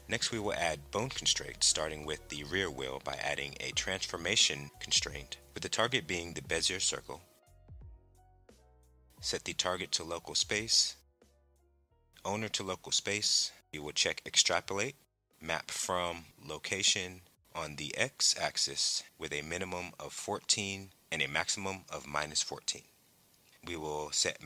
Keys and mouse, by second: 0.0 click, 2.1 click, 3.2-5.8 drag, 7.8-8.8 drag, 9.6-11.1 drag, 11.7-13.1 drag, 14.1 click, 15.7 click, 17.3-22.8 drag.